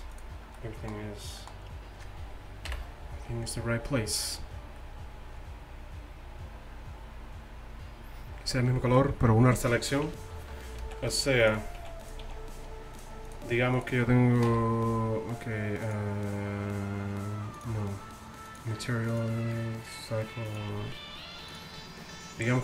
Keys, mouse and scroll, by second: 2.7 KP_1, 10.6-11.5 middle drag, 11.5-12.6 right drag, 11.8 z, 12.3 z, 14.5 t.